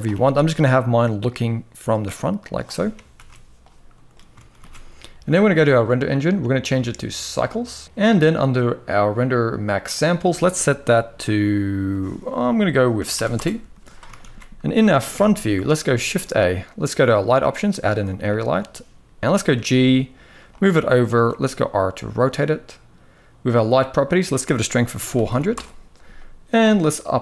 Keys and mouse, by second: 2.8 ctrl+b, 4.1 ctrl+s, 5.5 click, 6.3-7.2 drag, 9.6-13.1 drag, 13.9 ctrl+s, 14.8 KP_1, 15.7 shift+a, 18.0 shift+middle click, 20.8 r, 23.2 click, 23.8-25.2 drag, 26.4-27.2 drag.